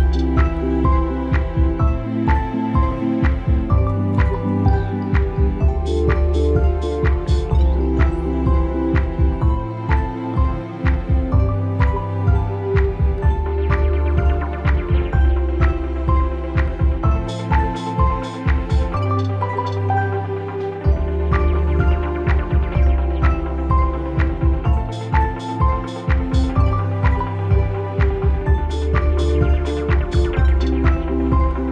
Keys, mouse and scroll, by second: 1.6 alt+right click, 2.0-3.8 alt+drag, 3.8 scroll down 1, 5.2 ctrl+d, 5.7 scroll down 1, 7.8 click, 16.4-18.1 drag, 19.8 click, 23.6-31.1 typing, 25.2 Return.